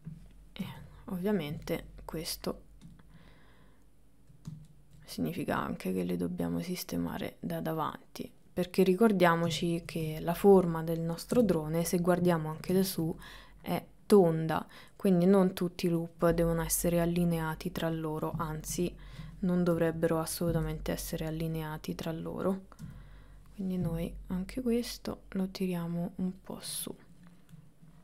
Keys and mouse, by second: 0.6 KP_1, 3.6 click, 6.1 click, 7.9 click, 8.5 middle click, 9.9 middle click, 11.4 KP_7, 15.0 middle click, 16.2 middle click, 17.4 middle click, 19.8 KP_1, 20.8 middle click, 22.0 click, 22.9 KP_1, 24.2-25.2 drag, 26.6 middle click, 27.8 middle click.